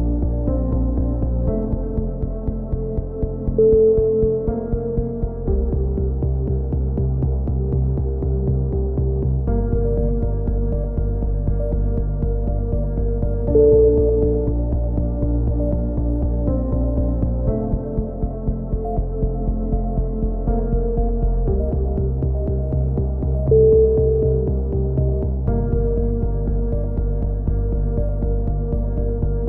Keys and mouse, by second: 0.6 a, 0.8 middle click, 0.8 z, 2.2 KP_7, 2.4 z, 2.8 b, 4.9 a, 5.1 b, 7.5 a, 7.5 z, 8.0 z, 9.6 KP_3, 10.0 z, 11.5 KP_1, 11.7 z, 12.0 e, 12.5 click, 14.9 s, 15.6-16.5 drag, 16.5 a, 17.3-17.8 drag, 18.3-18.8 drag, 18.8 c, 19.8-20.3 drag, 20.3 a, 20.4 z, 20.7 z, 21.1-21.7 drag, 21.6 KP_3, 25.0 z, 25.8-26.5 drag, 27.7-29.4 typing, 28.7 click.